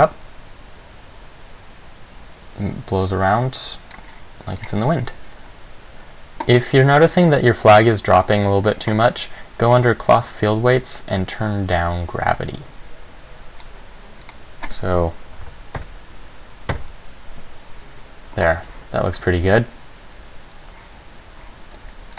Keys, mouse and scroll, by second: 4.8 right click, 9.9 click, 11.1 click, 14.4 click.